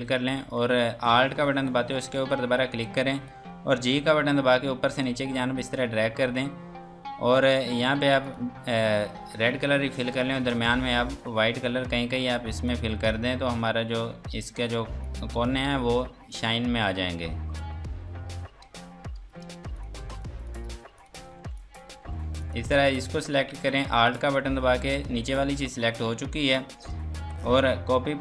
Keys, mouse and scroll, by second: 0.4 F2, 0.8 click, 1.7 alt+click, 2.2 scroll down 1, 2.7 F2, 2.9 click, 3.7 g, 4.4 click, 8.2 click, 18.7 ctrl+space, 19.5 space, 19.7 click, 20.0 F2, 20.2 click, 20.7 Escape, 21.0 click, 21.3 F2, 21.6 click, 22.0 Escape, 22.4 click, 24.1 alt+click.